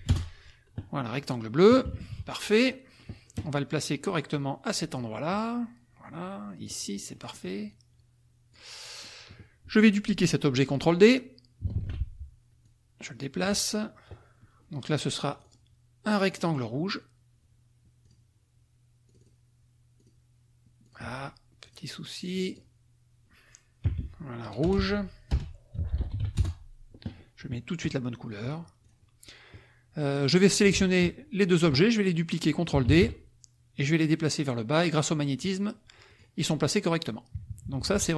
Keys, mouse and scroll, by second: 0.1 Return, 1.8 KP_Subtract, 2.6 click, 4.2-7.5 drag, 7.6-8.7 drag, 9.0 click, 11.8 ctrl+d, 12.6-13.7 drag, 15.3 click, 16.3 click, 18.0 click, 19.0 click, 20.8 click, 21.7 click, 22.3 click, 23.9 Right, 24.6-26.7 typing, 28.4 click, 28.8 click, 30.2 click, 30.9 shift+click, 32.8 ctrl+d, 33.8-35.6 drag, 36.1 click, 37.4 KP_Subtract.